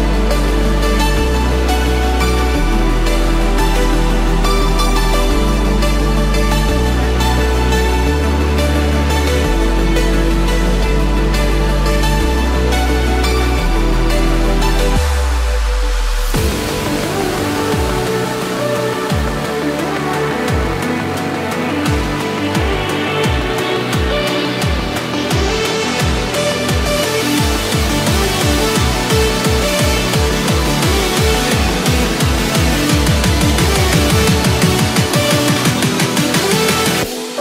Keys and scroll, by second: 4.8 Escape, 10.0 Return, 10.5 Escape, 11.6 ctrl+-, 12.0 ctrl+0, 13.9 ctrl+z, 14.9 ctrl+=, 16.6 Right, 21.1 Escape, 25.0 Return, 25.6 Escape, 30.7 Escape, 31.3 ctrl+-, 31.6 ctrl+0, 33.5 ctrl+z, 34.3 Escape.